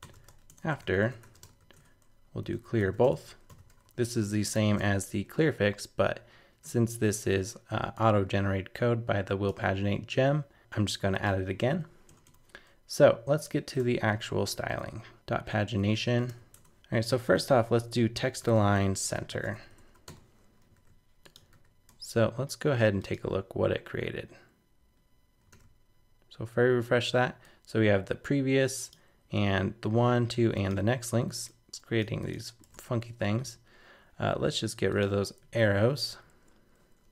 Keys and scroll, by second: 21.9 super+Tab, 25.5 super+r, 32.6 super+Tab.